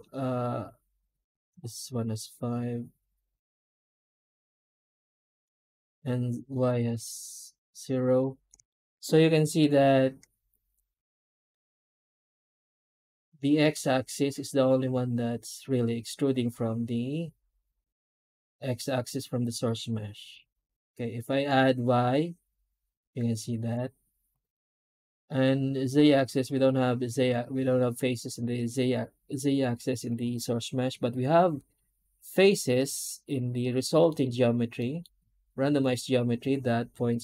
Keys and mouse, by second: 8.1 middle drag, 8.6 shift+middle click, 9.3 F9, 32.2-33.9 middle drag, 34.6 middle drag.